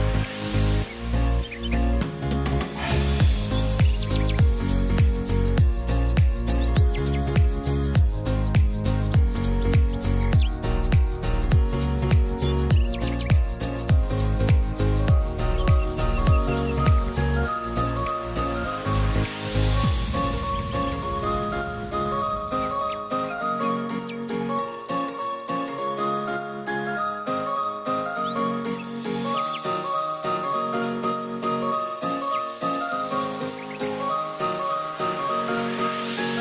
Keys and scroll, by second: 9.0 t, 9.7 r, 14.1 e, 32.0 ctrl+r.